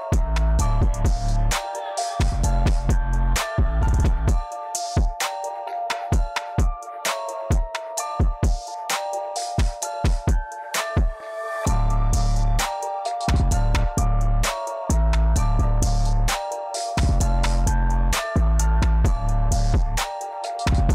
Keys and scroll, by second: 3.0 j, 10.6-12.6 typing, 12.6 Return, 19.9 j.